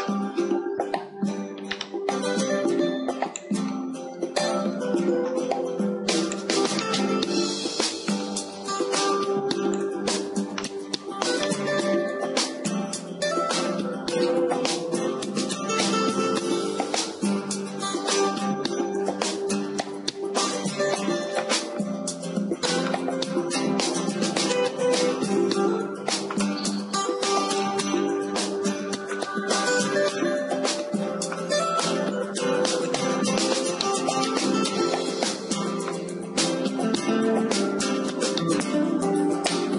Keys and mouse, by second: 1.2 shift+d, 3.5-5.5 drag, 4.6 shift+d, 6.5-8.4 drag, 7.4 shift+d, 10.0 click, 16.6 ctrl+z, 16.8 ctrl+z, 17.1 ctrl+z, 17.3 ctrl+z, 17.5 ctrl+z, 17.7 ctrl+z, 19.0 a, 19.2 a, 20.2 KP_7, 21.5-23.1 middle drag, 22.4 shift+d, 24.8-26.7 drag, 25.6 shift+d, 27.8-30.2 drag, 28.6 shift+d, 30.9-34.4 drag, 34.4-35.8 middle drag, 35.8 click, 36.3-37.3 middle drag, 37.3-38.7 drag, 38.7 w.